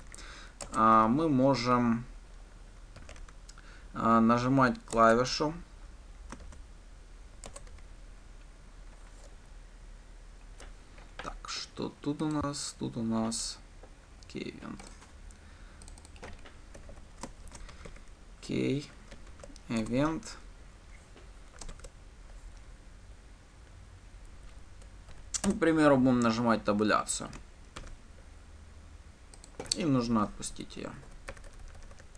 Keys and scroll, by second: 1.1 Return, 1.5 Return, 5.7 Return, 17.4 Delete, 20.3 Delete, 20.6 Return, 25.9 Return, 28.2 ctrl+d.